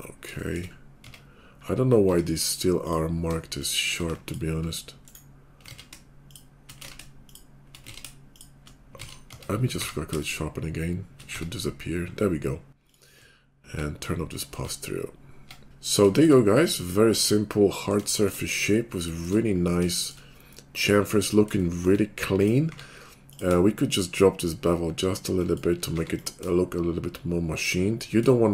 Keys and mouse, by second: 1.0 Tab, 2.0 Tab, 5.6 ctrl+z, 6.8 ctrl+z, 8.0 ctrl+z, 9.1 ctrl+z, 9.3 Tab, 9.7 q, 11.3 Tab, 13.1 Tab, 14.6 Tab, 16.1 Tab, 20.7-27.7 drag, 22.6 q, 25.9 q.